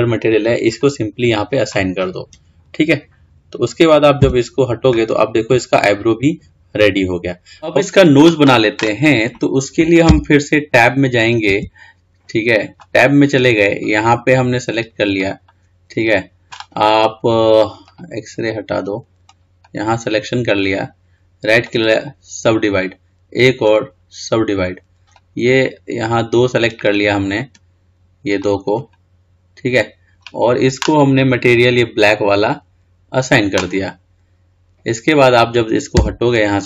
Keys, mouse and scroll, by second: 0.9-3.9 drag, 4.4 Tab, 5.2-6.9 scroll down 3, 6.9-7.4 scroll up 2, 7.8-10.9 scroll up 3, 11.4 click, 12.1 Tab, 14.0 click, 15.4 click, 18.0-19.5 drag, 21.9 right click, 23.9-25.3 right drag, 25.3 click, 27.4-28.6 scroll up 4, 28.6 click, 31.7 click, 32.6-33.9 drag, 33.9-36.1 scroll down 5, 36.1 Tab.